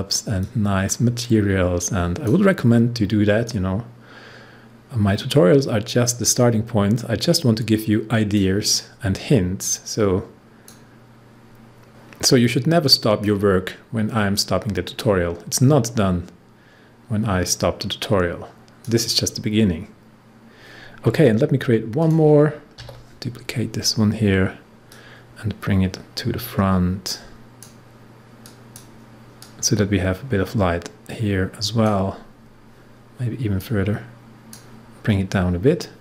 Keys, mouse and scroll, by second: 0.4-11.0 drag, 11.0-11.9 scroll down 1, 11.9-19.4 drag, 19.4-20.3 scroll up 1, 20.3-20.6 scroll down 1, 22.0 click, 22.7 ctrl+d, 24.8-36.0 drag.